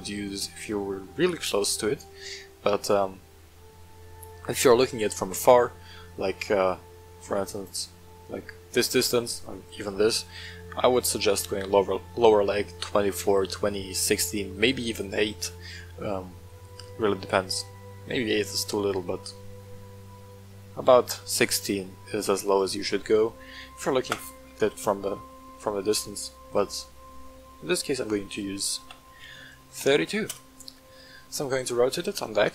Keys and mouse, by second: 7.1-7.4 middle drag, 10.5-10.8 middle drag, 16.8-18.3 middle drag, 20.3 middle click, 23.1 middle drag, 24.8-25.2 middle drag, 26.4 middle click, 27.1 shift+middle click, 28.7 r, 29.2 x, 29.7 KP_9, 30.3 Return, 30.3 KP_0, 31.2-31.5 middle drag.